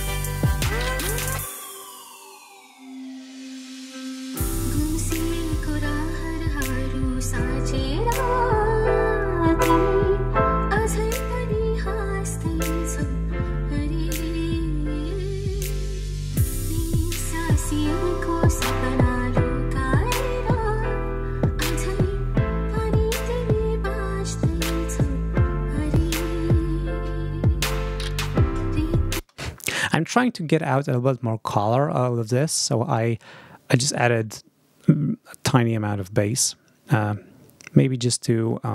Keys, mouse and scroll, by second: 3.1 ctrl+scroll down 2, 6.6-8.0 drag, 8.1 scroll down 2, 8.7 click, 9.2 scroll down 2, 9.5-10.9 drag, 11.5 click, 12.6-14.0 drag, 14.8 click, 15.8 click, 16.8-18.1 drag, 18.9-20.1 drag, 20.1 scroll up 2, 20.8 scroll down 2, 21.2-22.3 drag, 23.7-24.9 drag, 29.0 space.